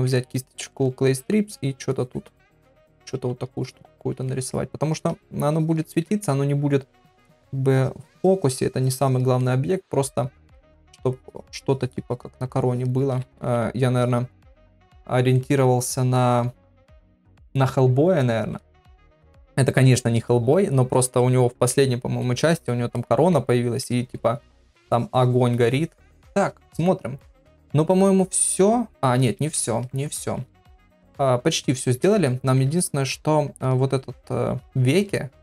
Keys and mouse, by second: 0.6-1.3 [, 2.0-3.1 drag, 3.5 click, 4.0 [, 4.3 middle click, 5.0 click, 5.5 click, 5.9 middle click, 7.0 middle click, 7.7-9.2 drag, 9.4 middle click, 10.6 middle click, 11.1-12.2 drag, 12.5 shift+click, 13.4 ctrl+z, 14.0 click, 14.6 middle click, 15.4 middle click, 16.2 click, 23.0 middle click, 23.9 middle click, 24.8 click, 25.6 click, 29.3 ctrl+Tab, 30.5 ctrl+s, 31.8 shift+middle click, 32.3 ctrl+middle click, 32.8 shift+middle click, 34.7 middle click, 35.2 shift+middle click.